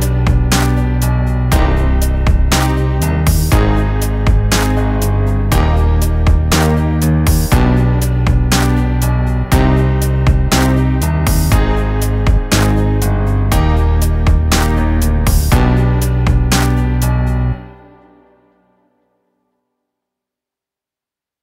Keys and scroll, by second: 6.8 shift+Page_Down, 10.6 shift+F2, 11.2 Escape, 11.9 F9.